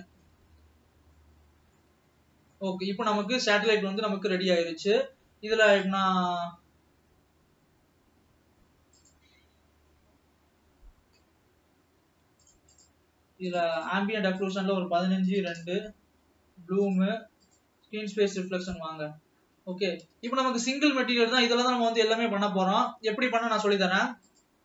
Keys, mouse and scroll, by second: 0.6 alt+a, 1.0 scroll down 2, 1.4-2.1 middle drag, 2.1 Tab, 2.3-2.7 scroll up 3, 2.8-3.8 middle drag, 3.8 ctrl+s, 11.0 click, 11.2 scroll down 2, 14.1-17.1 drag, 17.8 click, 19.1 drag, 19.4 scroll up 3, 20.1 scroll up 1, 20.9 ctrl+s, 21.1 scroll down 2, 21.6-24.6 middle drag.